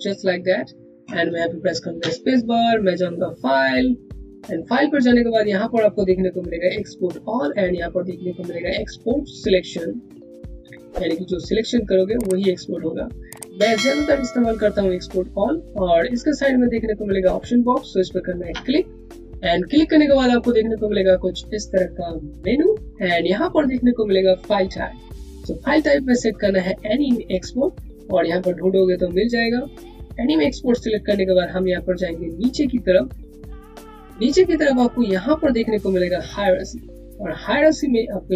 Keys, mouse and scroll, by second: 1.9 click, 10.3 space, 17.8 space, 20.2 click, 27.9 click, 29.6 click, 31.9 click, 36.8 click.